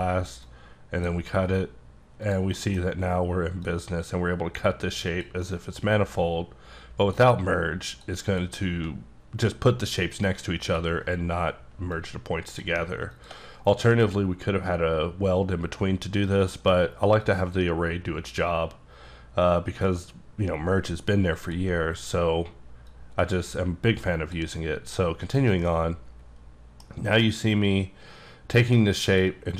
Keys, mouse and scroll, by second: 0.4 click, 2.2 click, 2.5 middle click, 3.6 click, 5.1 click, 5.4 middle click, 7.0 click, 7.9 click, 8.3 click, 10.6 click, 12.0 click, 13.1 click, 16.3 middle click, 17.2 click, 21.4 click, 23.2 click, 25.2 click, 25.6 middle click, 27.6 click.